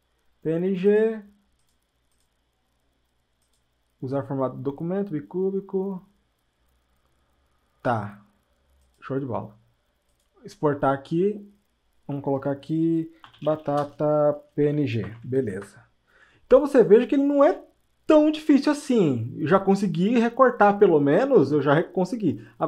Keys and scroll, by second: 13.8-14.6 typing, 15.8 typing.